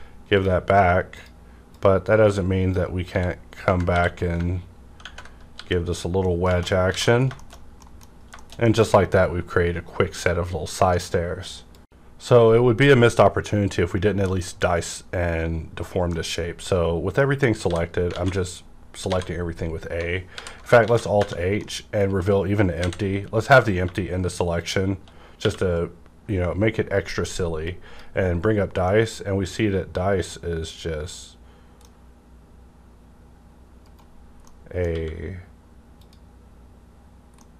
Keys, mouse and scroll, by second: 0.4 click, 1.1-5.0 drag, 3.1-3.9 typing, 5.0 ctrl+Tab, 5.3 ctrl+Right, 5.3 w, 5.6 g, 7.0 alt+a, 7.1 scroll down 1, 7.4 shift+middle click, 8.1 scroll down 1, 8.4 middle click, 8.4 shift+middle click, 8.7 shift+middle click, 17.7 middle click, 17.7 a, 19.1 alt+a, 20.3 alt+h, 20.8 a, 21.2 1, 21.5 middle click, 21.6-24.6 middle drag, 22.8 a, 24.6 shift+click, 25.4 q, 28.8 scroll up 1, 28.8-34.2 middle drag, 33.8 right click, 34.2 scroll down 1, 34.4-36.0 middle drag, 34.9 q, 36.0 click, 37.4-37.5 middle drag.